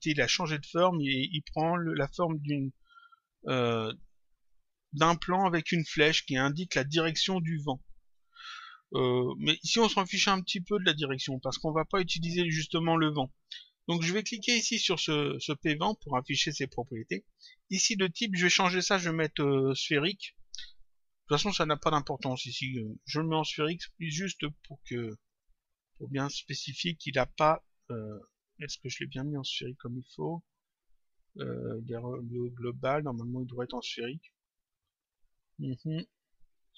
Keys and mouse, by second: 0.5 click, 3.9 click, 6.0 click, 10.1 click, 13.6 click, 15.7 click, 18.9 click, 23.8 click, 25.2 click, 29.3 click, 33.1 click, 34.1 click.